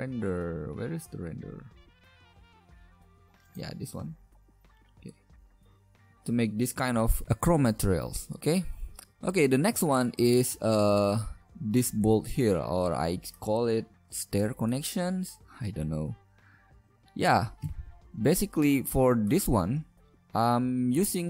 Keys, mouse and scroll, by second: 9.2 middle click, 9.9-10.4 middle drag, 17.6 KP_Decimal, 21.1 KP_Divide.